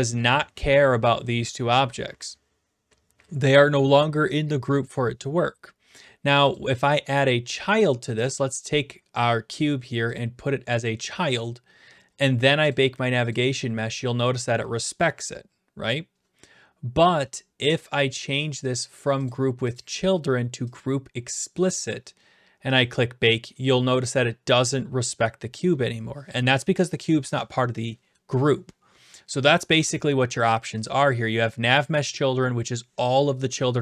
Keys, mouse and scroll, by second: 0.0-0.3 typing, 0.2 right click, 6.5 click, 6.9 right click, 8.6-9.8 drag, 10.8 click, 11.4 click, 12.7 click, 13.3 click, 17.8 click, 18.7 click, 19.3 click, 19.8 click, 20.8 click, 22.8 click, 30.5 click, 30.9 click.